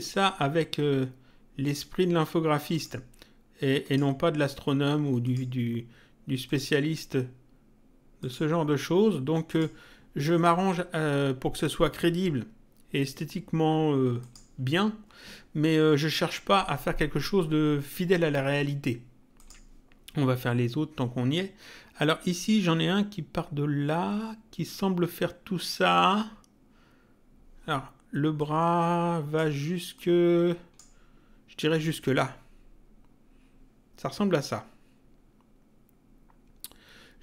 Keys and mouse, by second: 1.7 click, 2.7 click, 3.8 click, 5.2 click, 6.5 click, 8.2 click, 9.5 click, 14.2 click, 19.4 click, 28.4 click, 30.0 click.